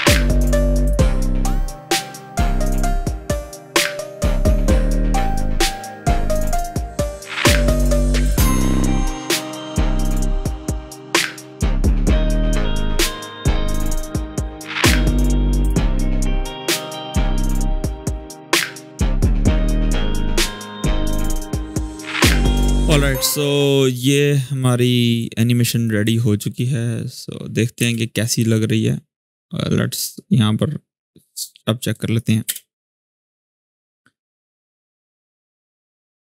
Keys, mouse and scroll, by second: 1.9 click, 2.8-3.5 click, 3.6-4.0 click, 4.2 ctrl+z, 4.2 click, 4.4 space, 4.9 alt+scroll down 1, 5.4-6.2 click, 6.2 space, 6.6-7.0 click, 7.3-11.7 typing, 7.3 scroll up 1, 8.0-8.5 click, 8.5 scroll up 1, 8.7 click, 9.1 click, 9.4 ctrl+z, 9.6 click, 9.7 ctrl+z, 9.9-10.3 click, 10.4 ctrl+;, 11.0 click, 11.1 shift+click, 11.3 click, 11.7-12.1 click, 12.4 click, 12.6 ctrl+d, 12.7-13.1 click, 13.6 click, 14.1 click, 14.3 scroll down 1, 14.3 space, 15.0 click, 15.2 space, 15.7-16.4 click, 16.6-17.2 shift+click, 17.5 click, 17.8 space, 18.4 click, 19.5 click, 19.9 shift+click, 20.1 u, 20.4 click, 20.4 shift+click, 20.7 alt+[, 20.9-21.3 click, 21.4 space, 22.4 space, 23.1 click, 24.4-27.5 drag, 27.5 space, 28.4-30.0 drag, 31.2-32.1 click, 32.2 shift+space.